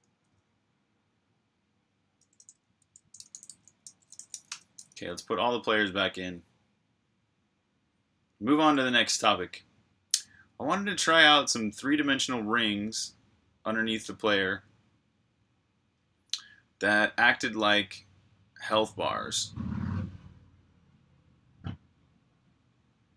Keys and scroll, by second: 2.7 Escape, 2.9-4.7 typing, 6.5 typing.